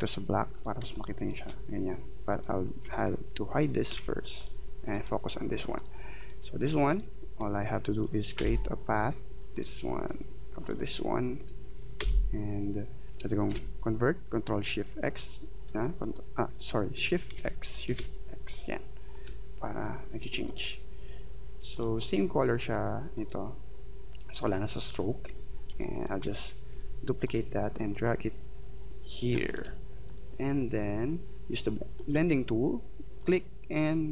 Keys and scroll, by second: 0.8 space, 3.9 ctrl+3, 8.3 p, 11.9 v, 13.5 shift+x, 17.3 shift+x, 25.7 space.